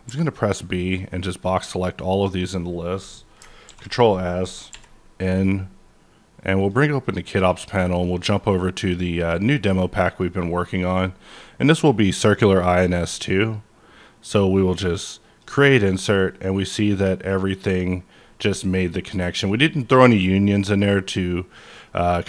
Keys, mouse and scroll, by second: 0.0 b, 0.6-4.2 drag, 3.6 ctrl+s, 4.2 middle click, 4.7 n, 6.6 click, 7.4 click, 8.8 click, 10.1 click, 14.1-21.7 drag, 16.2-21.7 middle drag.